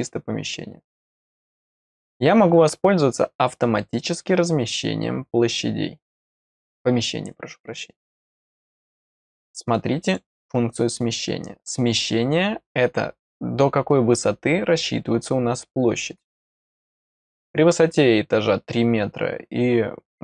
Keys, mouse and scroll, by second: 9.3 click.